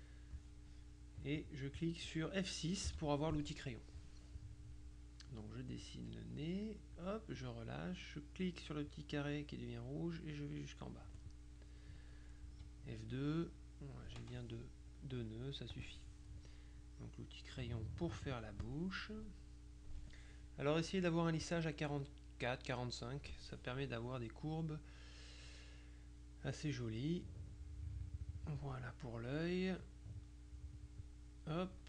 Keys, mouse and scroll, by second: 2.9 F6, 5.3-7.5 drag, 9.0-11.7 drag, 11.9 middle click, 12.5 F2, 15.8 click, 17.3-19.1 drag, 19.2 middle click, 26.6-29.2 drag, 29.9-31.8 drag.